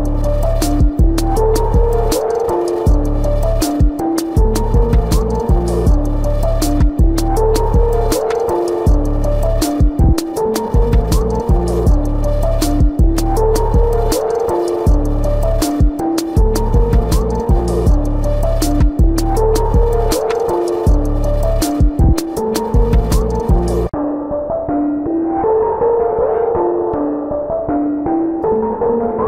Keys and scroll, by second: 0.1 ctrl+-, 0.4 ], 0.9 ctrl+alt+z, 5.2 ctrl+-, 5.6 space, 5.9 ], 6.9 space, 8.1 space, 9.5 space, 10.4 space, 11.6 ctrl+=, 13.6 ctrl+=.